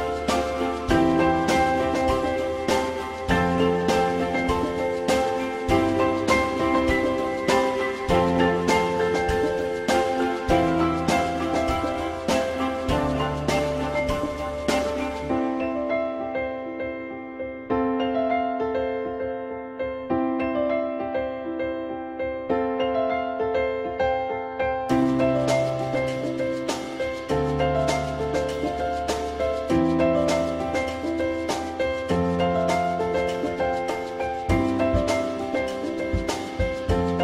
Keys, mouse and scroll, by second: 6.6 F4, 8.7 click, 13.2 ctrl+s, 19.8 alt+middle click, 23.2 alt+middle click, 31.7 alt+middle click.